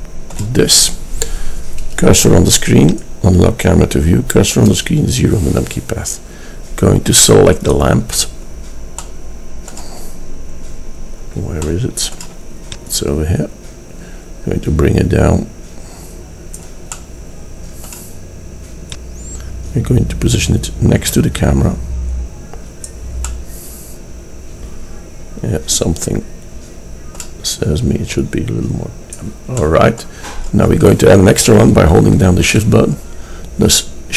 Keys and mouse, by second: 2.9-4.8 drag, 4.8 KP_0, 6.0-7.7 drag, 9.1-15.2 middle drag, 17.1 click, 20.8 middle click, 23.0 middle click, 29.7 middle click, 31.5 middle click, 32.2 shift+d.